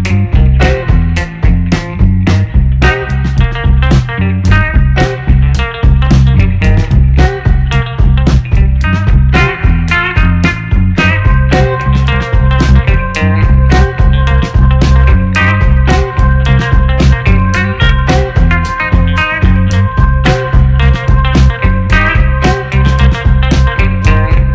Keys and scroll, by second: 3.1 3, 3.3 2, 3.5 8, 4.1 Return, 16.9 8, 17.5 Return, 20.2 Return.